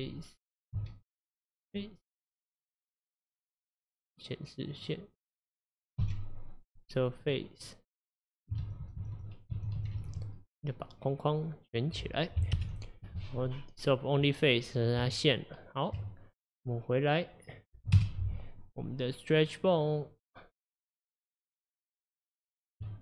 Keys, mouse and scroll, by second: 1.7 x, 3.7-5.4 drag, 6.0 x, 7.7 middle click, 8.6 ctrl+z, 8.8 ctrl+z, 9.0 ctrl+z, 9.2 ctrl+z, 9.5 ctrl+z, 9.8 ctrl+z, 10.0 ctrl+z, 10.4-12.6 middle drag, 12.6 ctrl+alt+F11, 13.9-15.0 middle drag, 15.0 Tab, 18.0 KP_Divide, 19.4 click, 22.8 Tab.